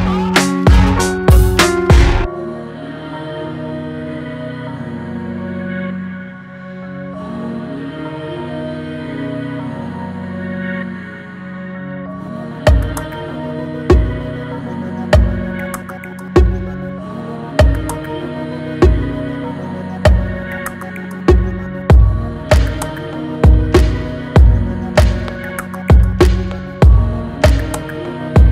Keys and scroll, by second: 3.6 ctrl+t, 24.3 ctrl+t.